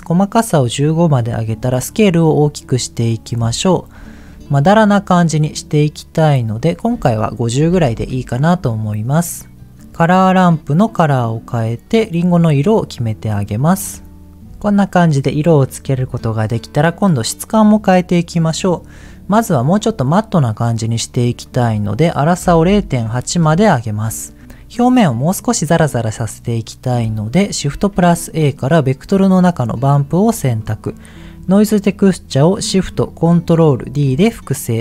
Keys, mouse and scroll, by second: 1.1-2.7 drag, 3.5-3.9 scroll up 3, 4.0 shift+middle click, 4.3-4.8 scroll up 2, 5.7 click, 6.8-7.9 drag, 9.7 click, 13.4 click, 13.8 click, 14.3 click, 21.4-23.3 drag, 27.6 shift+a, 30.5 middle click, 31.3 click, 33.8 ctrl+shift+d.